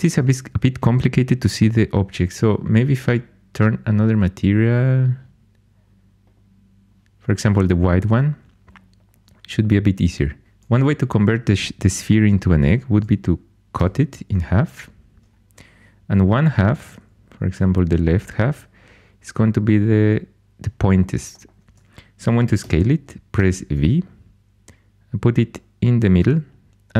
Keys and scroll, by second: 10.4 2, 13.7 c, 17.5 4, 22.6 s, 23.3 v.